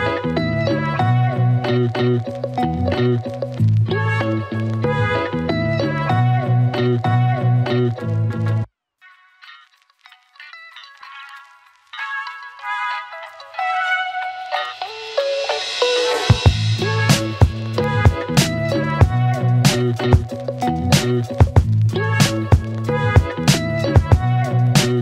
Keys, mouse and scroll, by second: 1.3 Return, 4.4-5.3 click, 13.1 Return, 14.5-15.4 click, 15.5 space, 21.8 space, 23.5 click, 24.9-25.0 typing.